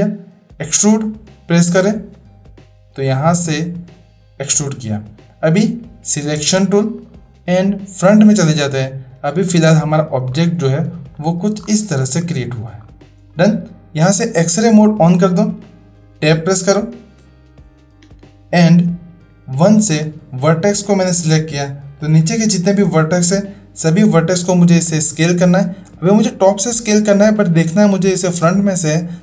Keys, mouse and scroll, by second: 0.5 ctrl+z, 0.7 click, 2.1-4.4 drag, 6.4 space, 7.0 click, 9.4 shift+click, 11.1 shift+middle drag, 12.3 shift+middle drag, 14.6 click, 17.2 Tab, 19.2 Tab, 19.2 1, 20.0-21.1 drag.